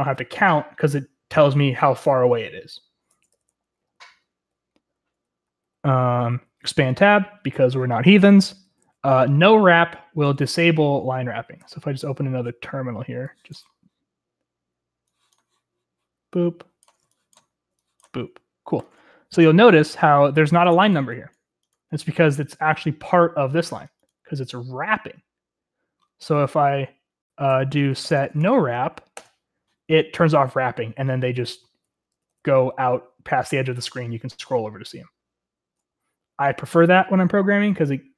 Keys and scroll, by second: 3.9-10.0 typing, 11.8 super+t, 27.5-29.1 typing, 31.5-33.2 typing, 34.5-37.3 typing.